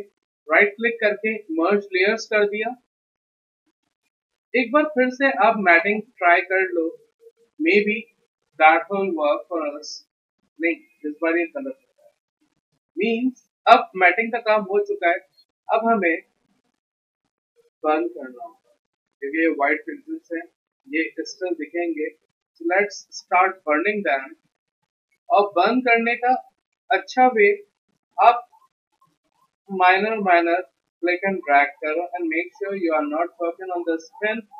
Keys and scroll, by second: 9.2 Return, 13.4 ctrl+z.